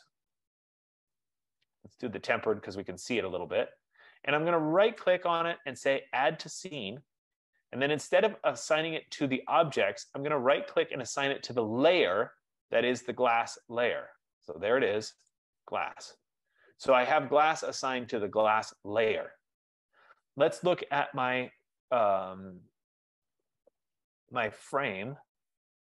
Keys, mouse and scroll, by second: 1.7 scroll, 3.5 click, 5.2 right click, 7.2 click, 8.4 F15, 10.7 right click, 15.7 click.